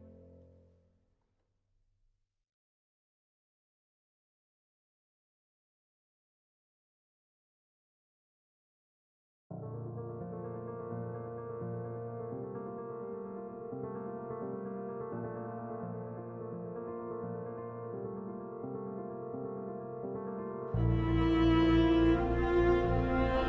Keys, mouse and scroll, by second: 6.6 End, 7.4 shift+Home, 9.5 a, 15.7-16.4 typing, 18.0 shift+a, 18.3 space, 19.4-20.8 drag, 20.8-23.4 drag.